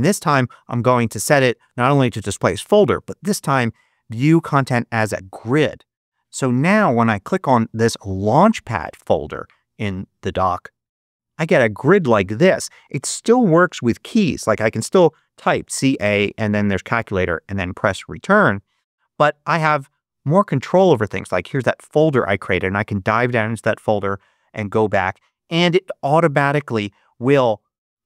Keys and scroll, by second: 14.4 c, 14.7 a, 18.6 super+q.